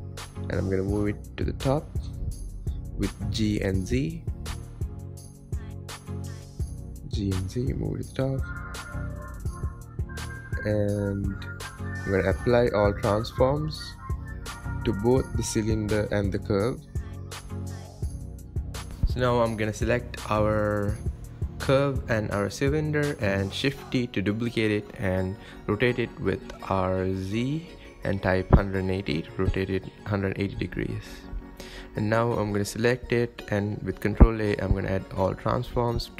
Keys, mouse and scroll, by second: 1.7 g, 6.6 g, 8.9 n, 9.9 click, 11.5 ctrl+a, 14.8-16.2 middle drag, 16.2 KP_1, 16.9-17.4 scroll down 6, 17.4-17.9 scroll up 4, 17.9 click, 19.4 click, 20.7-22.5 drag, 22.5 shift+d, 23.3 r, 27.3 alt+z, 28.2-30.2 shift+middle drag, 30.2 click, 31.8 ctrl+a, 33.1 click, 33.9 ctrl+a, 35.4-35.9 shift+middle drag, 35.9-36.1 scroll up 4.